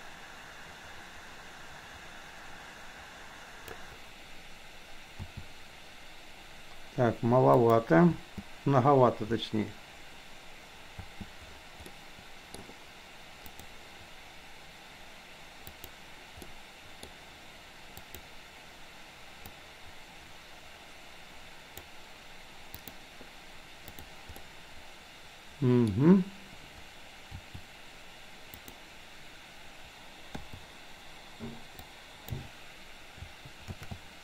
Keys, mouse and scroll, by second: 5.2 s, 8.2 space, 11.1 space, 12.0 middle click, 13.5 click, 15.7 click, 16.6-17.1 middle drag, 18.1 click, 19.6-21.8 drag, 22.8 click, 24.5-25.8 middle drag, 27.5 r, 30.5 i, 31.8-32.2 drag, 33.7 shift+d.